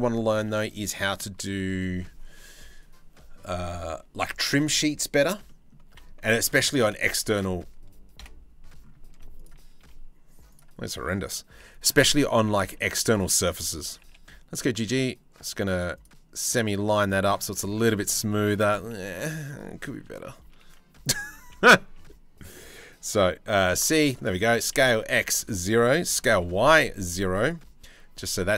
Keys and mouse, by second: 0.1 middle click, 0.5 middle click, 1.1 middle click, 5.1 middle click, 5.5 2, 6.2 click, 7.8 KP_7, 8.7 z, 9.4 1, 11.2 c, 13.5 g, 17.2 shift+middle click, 17.9 shift+middle click, 21.0 x, 23.1 c, 24.1 s, 25.7 s.